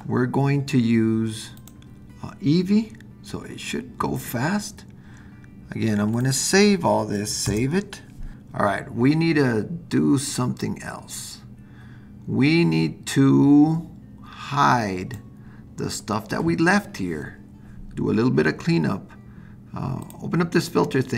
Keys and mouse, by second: 7.4 super+s, 10.6-15.2 drag, 20.1-21.1 drag.